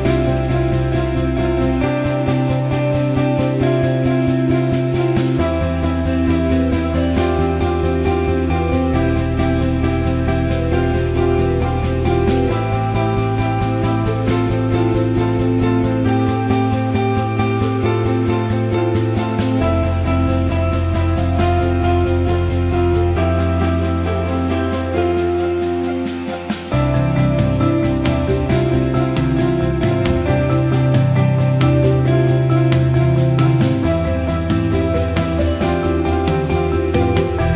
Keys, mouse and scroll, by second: 0.3 click, 1.3-5.4 drag, 6.4-6.8 alt+middle drag, 7.6 alt+middle click, 8.3-14.1 alt+middle drag, 14.2 alt+shift+middle drag, 14.5 alt+middle click, 16.3 alt+h, 17.4-17.7 middle drag, 19.4 click, 19.9-20.8 alt+middle drag, 22.4-25.3 alt+middle drag, 25.7-26.1 alt+middle drag, 28.4 click, 30.3 click, 30.9-31.6 alt+middle drag, 33.0 Tab, 35.4 l.